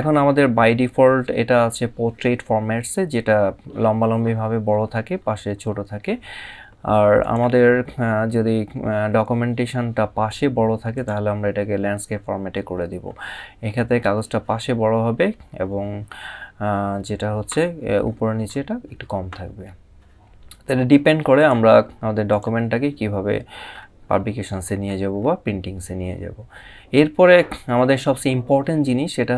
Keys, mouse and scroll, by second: 2.6 scroll down 1, 4.3 scroll up 1, 6.9 click, 10.6 click, 12.2 scroll up 1, 14.6 scroll down 1, 17.6 scroll up 1, 21.0 click, 23.5 scroll up 1, 24.0 scroll up 1.